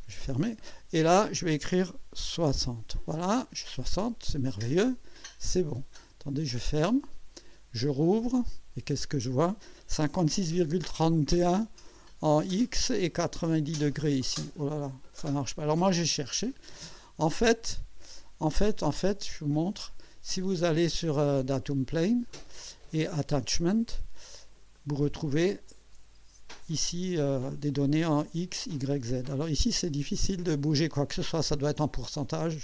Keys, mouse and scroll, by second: 0.9 click, 2.1-3.0 typing, 3.4 click, 6.5 click, 8.2 click, 11.5 click, 19.2 click, 22.3 click, 23.6 click, 24.7 click.